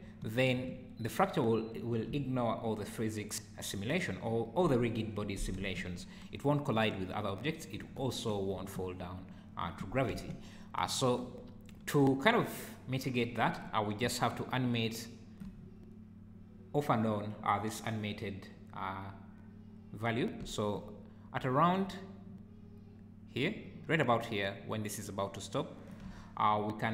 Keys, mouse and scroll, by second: 0.0 space, 0.5 space, 5.6 space, 8.2 Escape, 8.6 space, 14.4 shift+right click, 20.8 shift+right click.